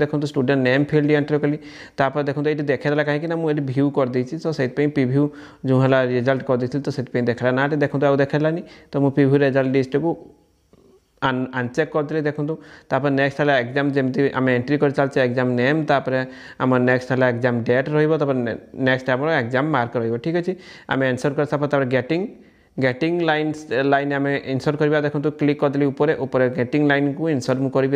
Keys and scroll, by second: 17.9 ctrl+?, 20.1 ctrl+?.